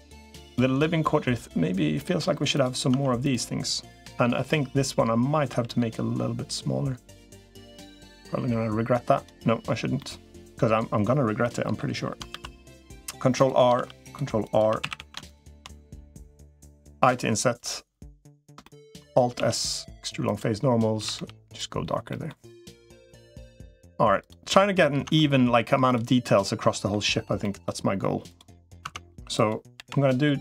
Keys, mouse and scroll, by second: 2.7 Tab, 3.9 l, 4.3 middle click, 5.3 s, 9.8 middle click, 11.2 middle click, 12.1 ctrl+r, 13.5 ctrl+r, 14.5 3, 14.7 a, 16.9 i, 18.4 shift+middle click, 19.3 alt+s, 20.9 a, 20.9 g, 21.9 middle click, 23.2 middle click, 24.9 Tab, 26.0 middle click, 27.2 middle click, 28.7 Tab, 29.7 l, 29.8 middle click.